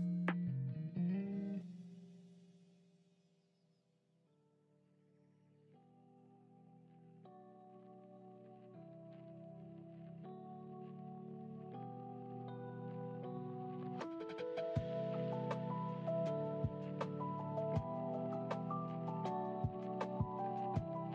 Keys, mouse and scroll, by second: 2.7-3.5 drag, 3.9-5.5 drag, 7.4 click, 9.2 g, 12.5 ctrl+z, 13.6 g, 16.7 ctrl+z, 18.0 click, 19.6 click.